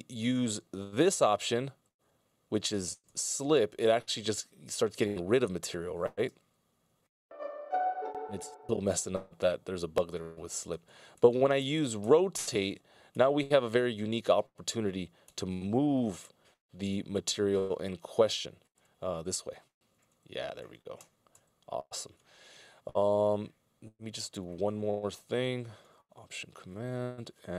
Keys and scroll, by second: 1.5 ctrl+alt+Left, 2.1 ctrl+alt+Left, 2.9 ctrl+alt+Left, 3.3 ctrl+alt+Left, 3.8 ctrl+alt+Right, 4.7 ctrl+alt+Left, 6.3 alt+space, 11.1 ctrl+alt+Right, 12.1 ctrl+alt+Right, 13.0 ctrl+alt+Right, 14.1 ctrl+alt+Left, 15.2 ctrl+alt+super+Right, 17.3 ctrl+alt+Right, 18.6 ctrl+alt+Right, 20.4 alt+super+Right, 21.1 alt+super+Right, 26.4 alt+k.